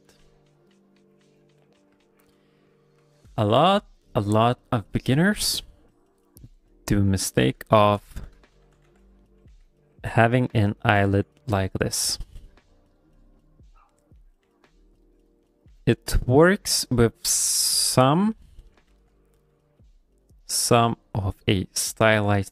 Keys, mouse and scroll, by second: 1.6 shift+click, 1.6 middle click, 2.0 ctrl+middle click, 2.3 middle click, 2.8 ctrl+middle click, 3.1 middle click, 3.4 shift+middle click, 5.9 click, 7.1 click, 7.6 middle click, 8.0 middle click, 8.6 g, 8.8 f, 9.2 middle click, 9.5 f, 10.1 click, 11.0 f, 11.5 click, 12.1 middle click, 12.7 click, 13.4 click, 13.9 click, 14.2 middle click, 14.4 f, 14.9 click, 15.2 click, 15.4 middle click, 15.7 f, 16.1 click, 16.7 middle click, 17.0 middle click, 17.6 click, 18.0 middle click, 18.3 middle click, 18.7 middle click, 18.9 f, 19.3 click, 19.5 click, 19.8 click, 20.0 click, 20.2 click, 20.6 click, 20.8 click, 21.0 click, 21.2 middle click, 21.7 click, 21.9 click, 22.2 middle click.